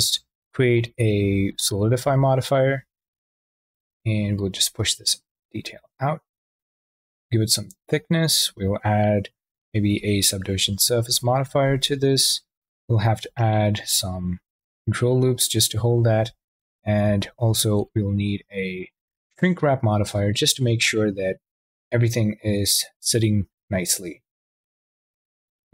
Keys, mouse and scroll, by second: 0.3-2.0 drag, 3.3 click, 9.3 ctrl+3, 10.6 Tab, 11.0 ctrl+r, 11.5 click, 12.9 click, 13.4 shift+q, 14.1 ctrl+z, 17.3-19.8 drag, 21.2-24.3 drag.